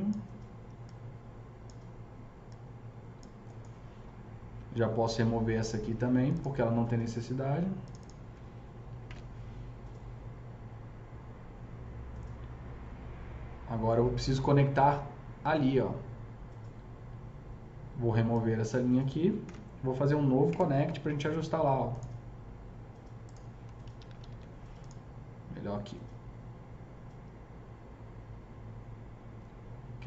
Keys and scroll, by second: 9.1 ctrl+BackSpace, 19.3 ctrl+BackSpace, 20.4 KP_0, 23.8 ctrl+z, 24.2 ctrl+z.